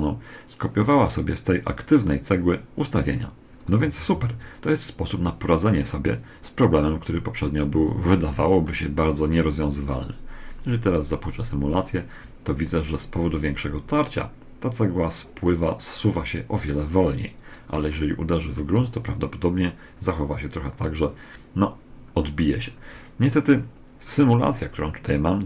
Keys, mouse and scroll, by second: 1.6 right click, 3.3-8.1 middle drag, 3.6 a, 3.8 z, 9.1 alt+a, 17.6-19.5 middle drag.